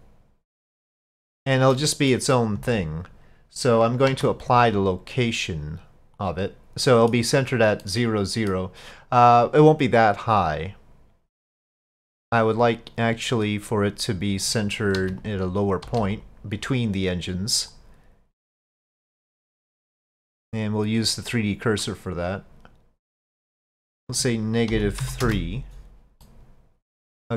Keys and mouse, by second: 1.8-2.2 middle drag, 4.1 ctrl+a, 6.9 drag, 7.1 middle click, 7.9-8.6 drag, 8.6 middle click, 13.4 click, 14.5 click, 15.7 click, 19.3-23.6 drag, 23.9-26.0 drag, 26.3-27.3 middle drag.